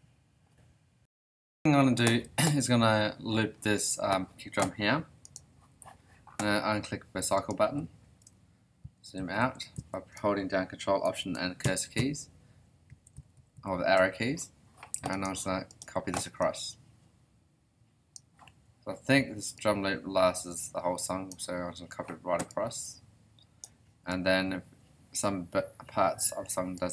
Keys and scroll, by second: 8.8 ctrl+alt+Left, 11.6 ctrl+alt+Left.